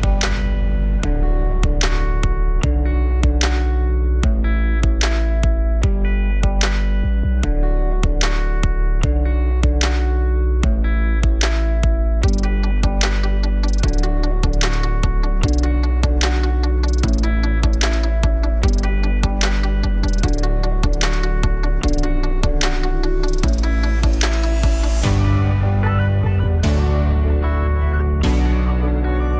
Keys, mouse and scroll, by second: 2.7 click, 4.4-7.0 drag, 7.8 click, 8.9 click, 10.0 click, 11.1 scroll down 1, 14.5-16.1 drag, 16.1 middle click, 16.4-16.8 scroll down 3, 16.7-18.8 middle drag, 18.8 scroll down 1, 20.8 click, 22.8 click, 23.7-26.3 drag, 28.2 click.